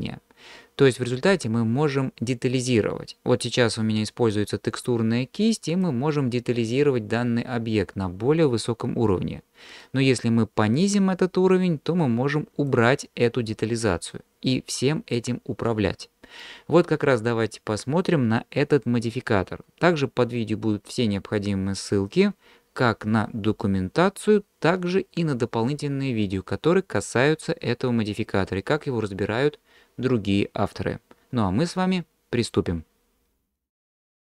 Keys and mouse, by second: 4.3-5.8 drag, 10.8-12.7 drag.